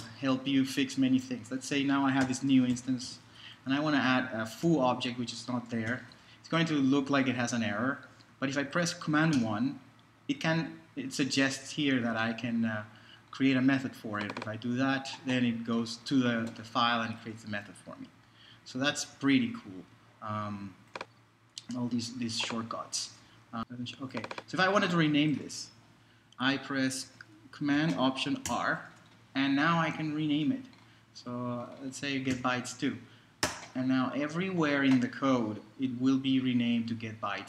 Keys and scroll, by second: 0.0 super+Return, 2.0-7.1 typing, 9.3 super+i, 19.1 super+z, 23.2 super+Left, 28.5 alt+super+r, 30.3 Right, 32.3 2, 34.4 Return.